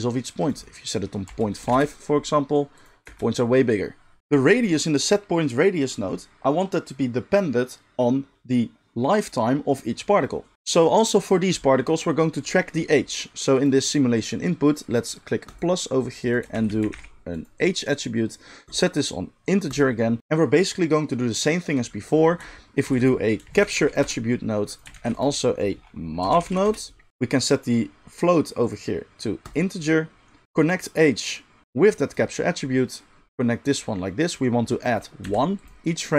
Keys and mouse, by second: 3.0 space, 13.6-15.6 middle drag, 15.6-17.4 drag, 17.4-18.8 middle drag, 18.8-24.8 drag, 22.8 shift+a, 24.8-28.8 shift+middle drag, 24.9 shift+a, 28.8-35.6 drag, 35.6-36.1 middle drag.